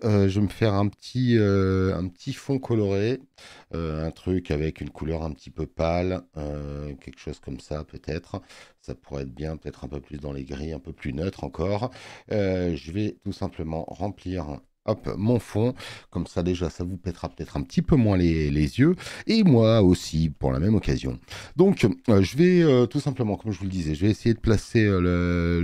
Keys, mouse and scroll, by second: 4.1 click, 9.4 click, 20.4-21.4 drag, 23.5 click.